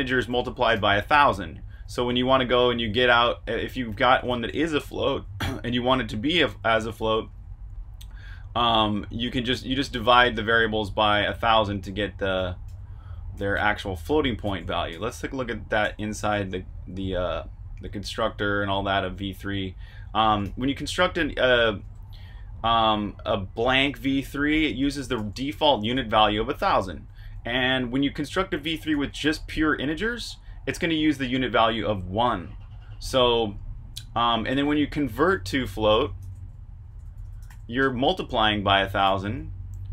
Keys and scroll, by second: 0.4-2.7 typing, 4.0-6.7 typing, 8.6-16.7 typing, 18.1-18.9 typing, 20.4 shift+v, 21.9 Escape, 23.4-25.1 typing, 26.5-27.8 typing, 28.9-29.6 typing, 31.3 Escape, 31.6-39.0 typing.